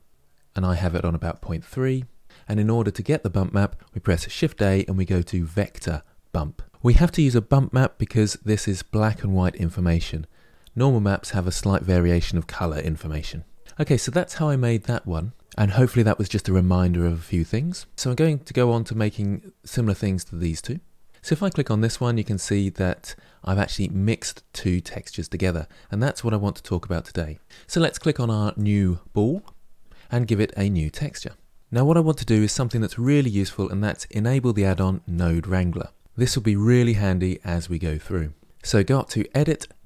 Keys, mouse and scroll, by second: 17.9 click, 18.7 click, 21.1 click, 28.4 click, 30.7 drag.